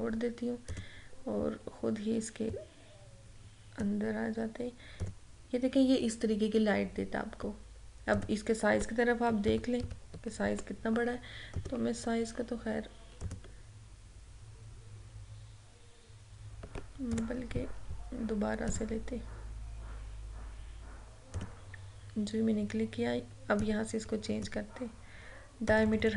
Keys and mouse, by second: 8.2 click, 9.6 ctrl+-, 11.5 right click, 13.2 click, 18.8 click, 21.4-25.8 drag.